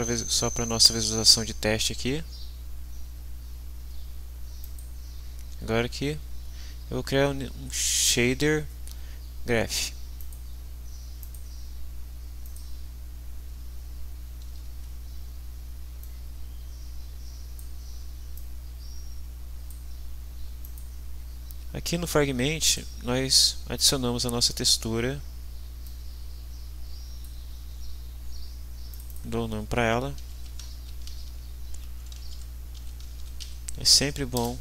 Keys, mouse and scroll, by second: 4.6 click, 10.2 click, 11.2 click, 12.4 click, 14.5 ctrl+s, 16.0-17.7 drag, 18.3-19.9 drag, 20.7 click, 22.6 right click, 25.8 click, 28.9 click, 29.9-33.9 typing, 34.4 Return.